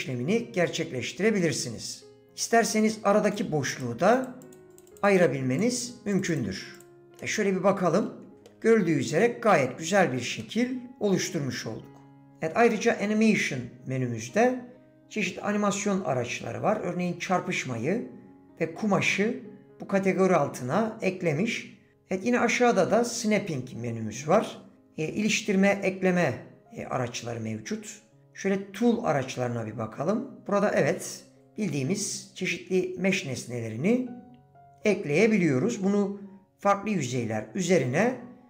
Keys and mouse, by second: 3.9-5.7 drag, 7.2 middle click, 8.3 shift+middle click, 8.7-10.1 drag, 10.4 click, 10.7-12.3 middle drag, 38.1-38.4 drag.